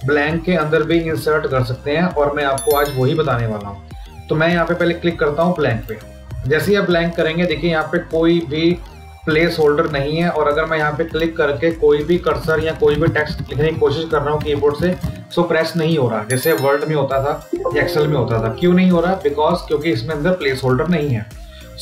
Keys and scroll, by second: 12.2 space.